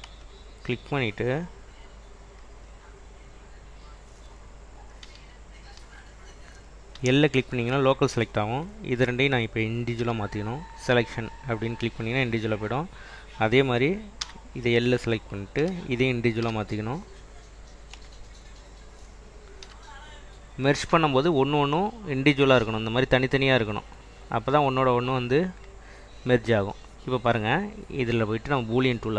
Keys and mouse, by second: 0.3 Tab, 5.2 /, 5.9 /, 7.1 l, 9.1 l, 10.1 p, 12.0 click, 12.8 click, 14.3 l, 15.8 l, 16.6 p, 18.0 Tab, 18.6 click, 19.9 /, 21.6 click, 23.8 click, 24.3 click, 28.4-29.1 drag.